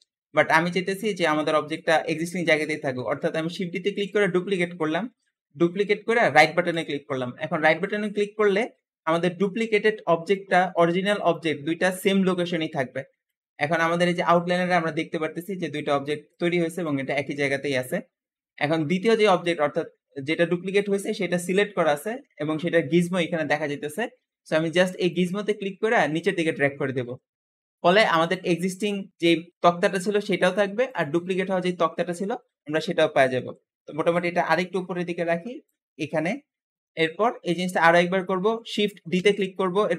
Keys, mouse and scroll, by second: 0.2 ctrl+z, 0.9 g, 2.5-3.7 scroll up 1, 3.7 shift+d, 24.9 click, 28.1 click, 30.7 click, 32.5-34.2 middle drag, 34.2 click, 35.8-37.8 middle drag, 37.8-39.0 scroll up 1, 39.0 shift+d.